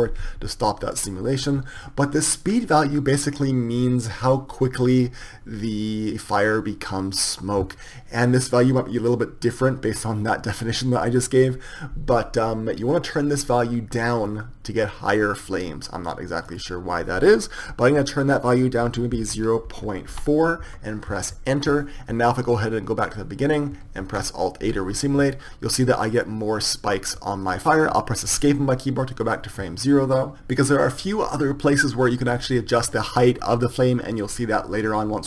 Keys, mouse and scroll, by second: 0.7-14.7 drag, 16.9-22.3 drag, 23.1-27.6 drag, 28.9 Escape.